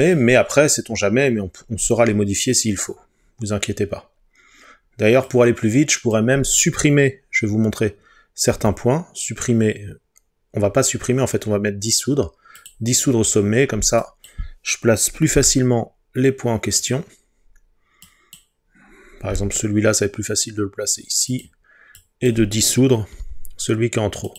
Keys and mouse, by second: 8.5 Delete, 15.4 g, 16.8 click, 19.4 g, 21.3-22.3 drag, 23.2 Delete.